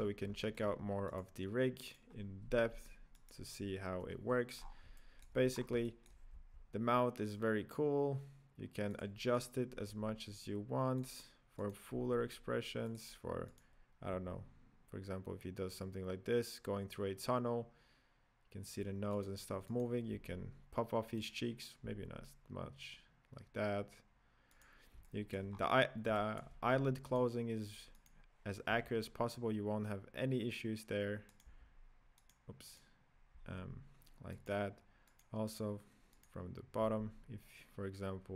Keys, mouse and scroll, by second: 0.3-1.3 shift+middle drag, 1.3 right click, 2.1 right click, 3.4 right click, 4.1 KP_Decimal, 4.7 scroll down 8, 4.9-5.5 shift+middle drag, 5.5 scroll up 4, 5.8-6.6 shift+middle drag, 6.6 g, 9.7 right click, 9.9 g, 11.9 right click, 12.3 g, 13.8 right click, 14.4 g, 20.0 right click, 20.5 s, 21.8 s, 25.1-25.5 shift+middle drag, 25.5 scroll up 4, 26.1-27.4 shift+middle drag, 27.4 right click, 28.2 right click, 28.7 g, 31.8 g, 33.1 right click, 33.7 g, 35.4 right click, 36.5 right click, 37.1 g.